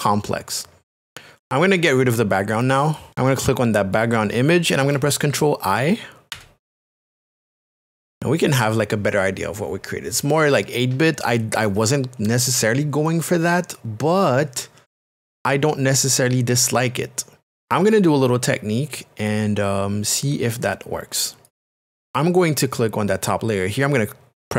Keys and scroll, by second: 6.3 ctrl+i.